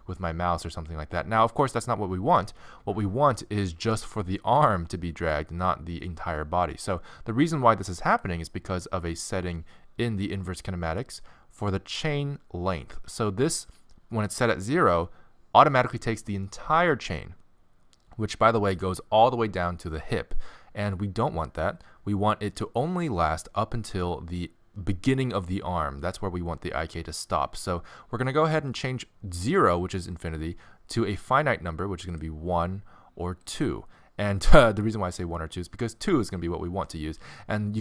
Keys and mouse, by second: 2.1-7.0 middle drag, 3.8 g, 9.2-24.7 drag, 32.1-37.3 drag, 37.3-37.8 middle drag.